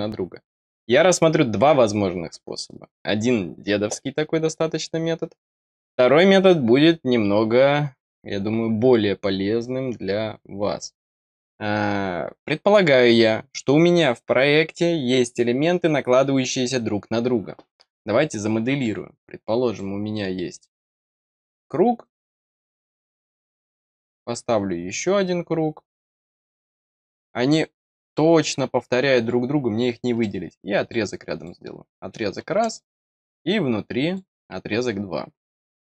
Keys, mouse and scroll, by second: 19.7 click, 20.5 click, 21.3 click, 22.0 click, 23.0 click, 26.0 click, 27.0 click, 28.8 middle click, 28.8 scroll down 1, 30.1 click, 30.8 click, 31.3 click, 33.1 click, 34.0 click.